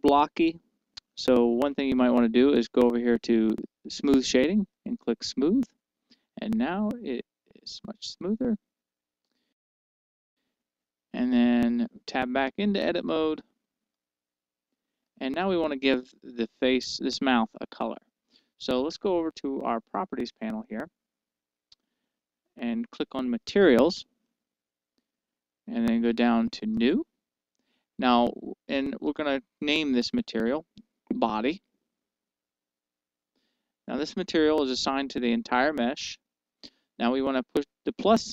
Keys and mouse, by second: 5.6-7.3 drag, 7.3-9.3 middle drag, 12.7 Tab, 12.7-17.4 middle drag, 20.4-22.5 drag, 24.6-26.0 drag, 27.5-29.0 drag, 29.8-32.1 drag, 33.0 click.